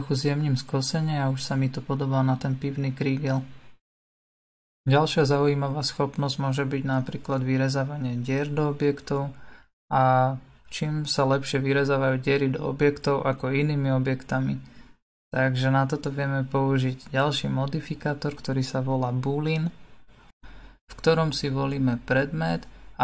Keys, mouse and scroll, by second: 2.4 Tab, 7.7 click, 8.5 middle click, 9.1 scroll down 2, 9.3-12.4 scroll up 2, 12.6-14.6 drag, 15.0-18.1 drag, 19.7-23.0 middle drag.